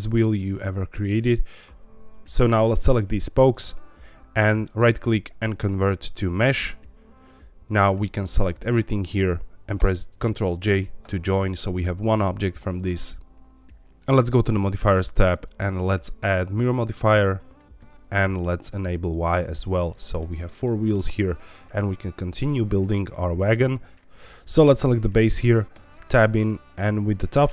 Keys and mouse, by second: 0.4 middle click, 8.2 shift+click, 10.6 ctrl+j, 12.7 click, 15.4-17.2 drag, 19.0 click, 19.9 middle click, 20.6 shift+middle click, 23.4 middle click, 24.8 click, 25.7 Tab.